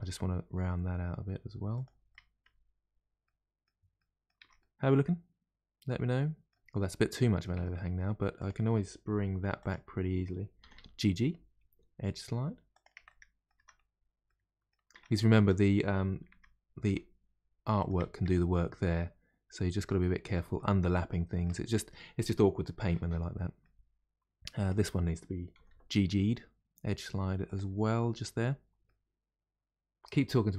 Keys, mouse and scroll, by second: 2.0 middle click, 2.8-3.2 scroll down 2, 3.2-4.4 middle drag, 4.4 Tab, 4.6-6.6 middle drag, 6.6-7.0 scroll up 1, 7.0 middle click, 7.5 Tab, 7.7 middle click, 8.3 click, 9.4 2, 9.6 click, 10.6 g, 13.0 middle click, 13.5 Tab, 13.8-14.2 scroll down 1, 14.2 middle click, 14.9 Tab, 15.3 Tab, 16.8 g, 19.5 scroll down 1, 19.8-23.0 middle drag, 23.0-23.3 scroll down 1, 23.3 middle click, 23.8-24.6 scroll up 2, 24.6 click, 25.5 g, 28.0 Tab, 28.4-28.8 scroll down 2, 28.8-30.5 middle drag.